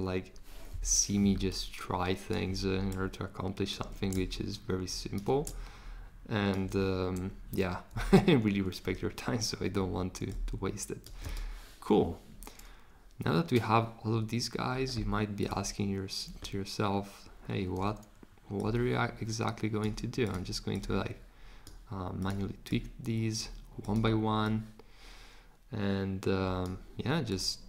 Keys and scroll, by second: 0.8 BackSpace.